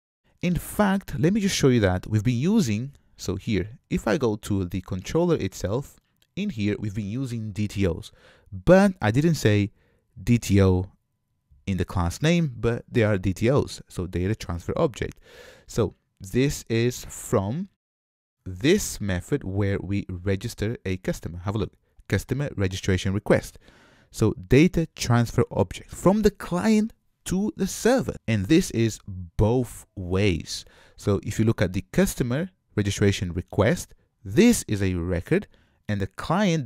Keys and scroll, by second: 1.0 super+z, 1.6 super+z, 2.2 super+z, 2.8 super+z, 33.6 super+b.